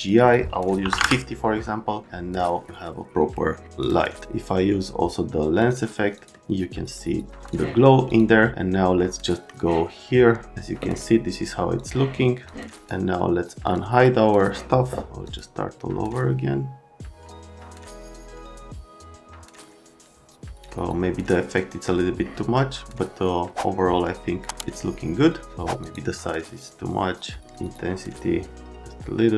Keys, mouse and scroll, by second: 0.0 click, 0.8 KP_5, 0.9 KP_0, 0.9 KP_Enter, 7.4 click, 8.1 click, 11.8 click, 12.8 scroll, 13.6 click, 15.2 click, 23.0 click, 25.8 click, 27.6 click.